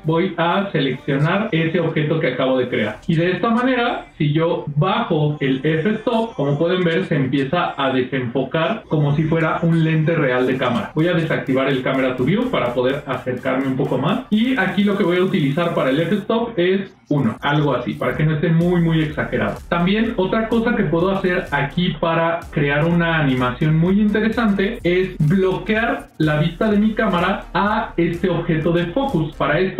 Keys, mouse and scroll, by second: 4.8-8.7 drag, 12.0 click, 12.7 ctrl+middle click, 14.0 shift+middle click, 16.1-19.4 drag, 25.9 click, 27.3 click, 27.7 click.